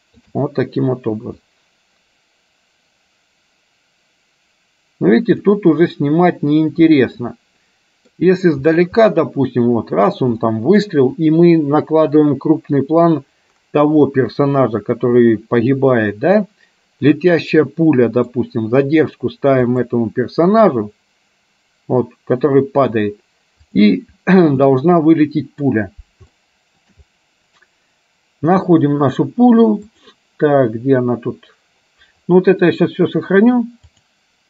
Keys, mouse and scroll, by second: 1.8-5.7 drag, 7.0-8.2 middle drag, 9.2-10.3 middle drag, 10.5 middle click, 17.3-18.4 middle drag, 19.8 click, 23.7 click, 24.8-25.8 middle drag, 26.5 shift+middle click, 30.2 click, 34.0-34.4 drag.